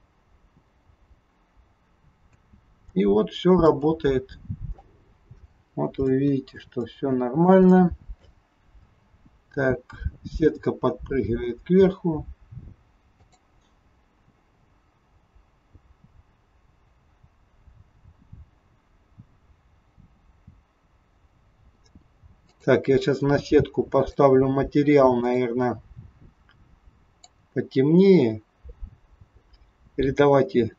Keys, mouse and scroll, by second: 2.4 space, 3.1-3.9 scroll up 3, 3.6 middle click, 5.1 scroll up 1, 5.6-6.0 scroll down 1, 6.1 shift+middle click, 6.8 middle click, 7.7 shift+middle click, 8.7 space, 10.8-11.9 scroll down 2, 14.9 click, 21.4 space, 22.4 click, 24.0 click.